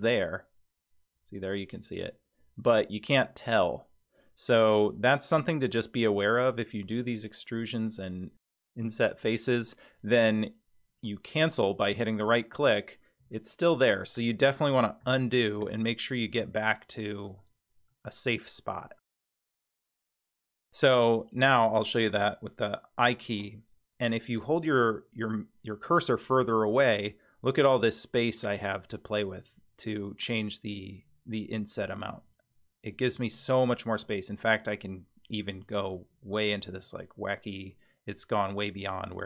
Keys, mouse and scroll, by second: 0.0 g, 13.2 g, 15.0 ctrl+z, 15.6 ctrl+z, 16.4 ctrl+z, 17.9-19.0 middle drag, 19.3 scroll down 1, 21.4 scroll down 1, 21.5 click, 26.4 i.